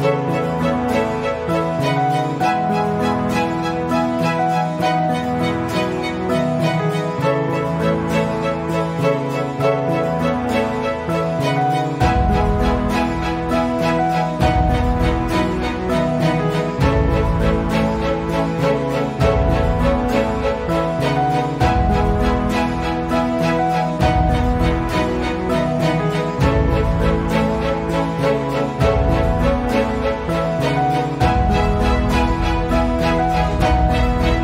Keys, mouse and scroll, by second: 0.4-1.8 ctrl+scroll down 2, 1.8 click, 3.0 ctrl+scroll up 1, 5.6 r, 6.2-7.4 drag, 10.2-11.0 typing, 12.2 shift+click, 12.3 shift+click, 13.2 click, 14.6 shift+click, 20.1 ctrl+z, 21.9 click, 22.4 ctrl+e, 23.8 click, 25.7 ctrl+z, 26.4 click, 27.0 ctrl+z, 27.8 ctrl+z, 28.4 ctrl+z, 29.2 ctrl+z, 30.4 click.